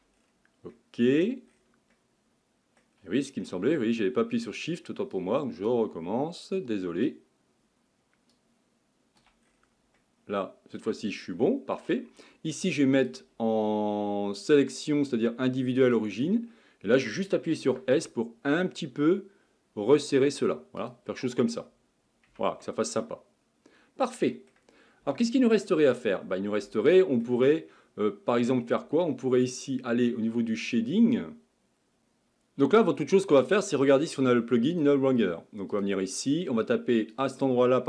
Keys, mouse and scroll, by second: 0.2-0.7 scroll down 5, 0.7 middle click, 1.5-1.9 scroll down 3, 1.9-3.4 middle drag, 3.4-4.3 shift+scroll up 8, 5.1 shift+click, 6.6 shift+click, 8.3 shift+click, 9.5-10.0 scroll down 5, 10.0-11.0 middle drag, 11.0-11.4 scroll up 1, 11.4-13.0 shift+middle drag, 13.0-16.0 drag, 16.5-17.7 scroll up 1, 17.7 s, 21.2-21.6 scroll down 4, 22.3 Tab, 22.7-26.1 middle drag, 26.1 scroll down 2, 26.8-29.8 shift+middle drag, 31.7 drag, 35.9-37.8 drag.